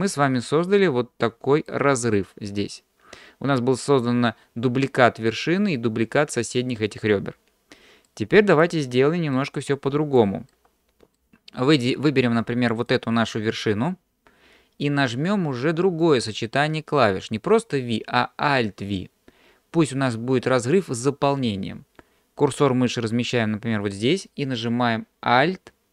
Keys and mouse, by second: 0.3-1.7 middle drag, 8.1 middle click, 9.4 shift+middle click, 10.5 shift+middle click, 12.8 click, 16.0-19.4 drag.